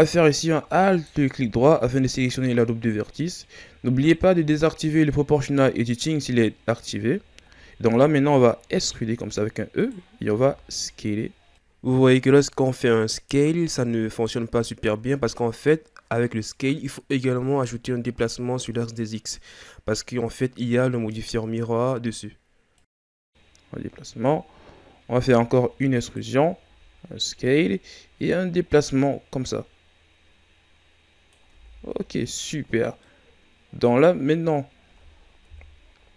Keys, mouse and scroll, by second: 7.2 shift+scroll down 1, 7.8-8.6 scroll up 2, 8.6 e, 19.8-22.9 drag, 25.2 e, 28.2-31.2 drag, 31.5 Tab, 31.9 scroll down 5, 32.9-34.5 middle drag, 34.5 scroll up 2, 35.4 KP_1.